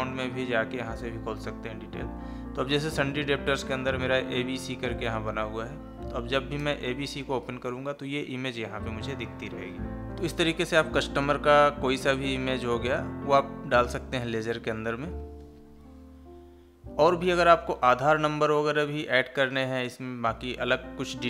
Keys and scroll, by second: 1.5 Down.